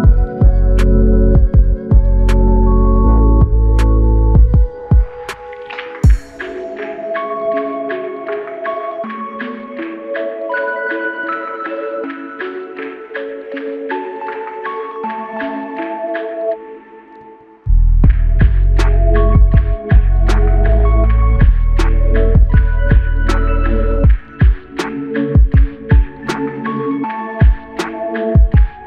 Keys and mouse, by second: 4.7 double click, 8.7 ctrl+i, 13.3 double click.